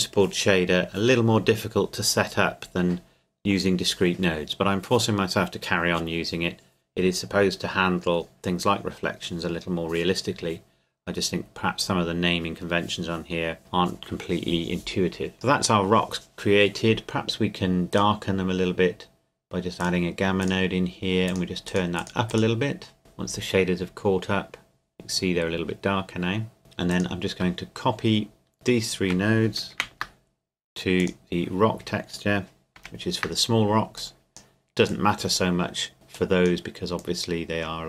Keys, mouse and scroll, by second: 17.9 click, 26.6 scroll down 1, 26.9 click, 28.5 shift+click, 29.7 ctrl+c, 31.0 click, 32.8 ctrl+v, 34.0 click.